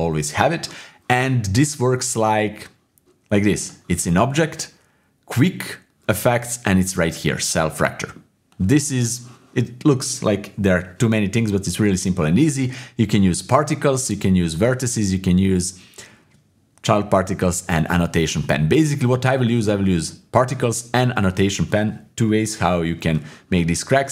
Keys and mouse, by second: 2.1-3.6 middle drag, 3.6-24.1 drag.